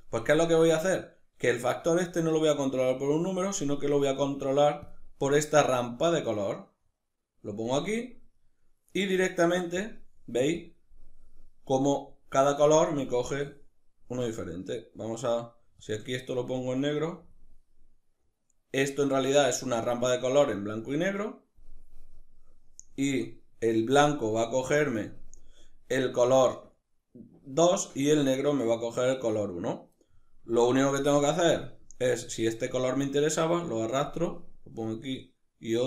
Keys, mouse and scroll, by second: 2.4-4.6 drag, 5.4 click, 8.0-9.4 middle drag, 9.4 click, 14.6 click, 20.5 click, 22.7 click, 24.3 click, 29.6-30.9 middle drag, 30.9 click, 31.4-32.0 middle drag, 32.0-33.7 drag, 34.5-35.7 drag.